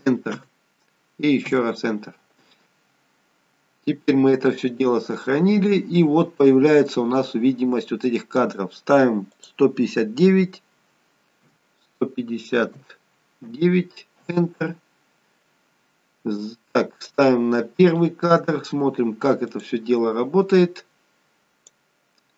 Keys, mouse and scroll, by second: 4.4-5.1 scroll down 1, 5.1 click, 9.4 click, 17.1 click, 19.5 click, 21.4 click.